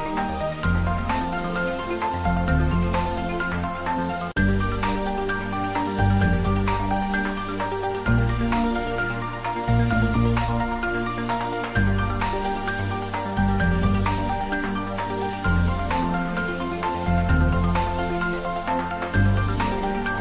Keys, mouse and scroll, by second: 0.1 ctrl+z, 0.7 s, 1.6 click, 2.1 e, 2.9 click, 3.1 Tab, 3.3 middle click, 3.6 Tab, 3.9 shift+z, 4.1 middle click, 4.5 Tab, 4.6 middle click, 5.1 Tab, 5.1-6.8 middle drag, 6.8 click, 7.6 click, 8.0 ctrl+middle click, 8.2 middle click, 9.2 Tab, 10.2 click, 10.7 middle click, 11.4 click, 12.8 2, 13.2 click, 14.4 3, 14.5 click, 15.3 middle click, 16.4 e, 18.2 click, 18.3 s.